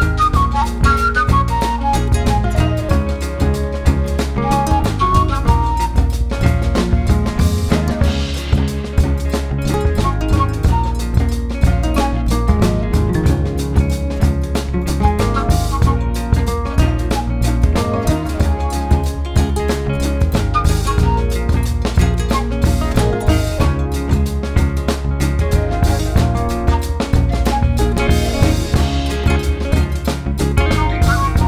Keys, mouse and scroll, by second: 0.6 middle click, 1.2 click, 1.3 middle click, 1.5 click, 2.2 middle click, 2.5 click, 3.0 middle click, 3.4 click, 4.1 middle click, 4.4 click, 4.6 middle click, 4.9-7.7 drag, 7.7-9.2 middle drag, 9.2-10.6 drag, 10.6 f, 11.6 click, 12.0 middle click, 12.4 f, 12.9 click, 13.3 f, 13.6 f, 14.1-16.8 drag, 16.8 f, 17.6-19.6 drag, 19.6 middle click, 19.9-20.2 scroll down 1, 20.2 ctrl+z, 20.3 ctrl+z, 20.4-20.8 ctrl+z, 20.9 middle click, 21.2 f, 22.2 click, 22.6 middle click, 22.9 ctrl+z, 23.2 click, 23.5 middle click, 24.0 click, 24.4 middle click, 24.8 scroll down 1, 24.9-25.9 middle drag, 25.9 scroll up 1, 26.0-27.0 middle drag, 27.0 shift+click, 27.3 middle click, 27.8 shift+click, 28.2-31.4 middle drag.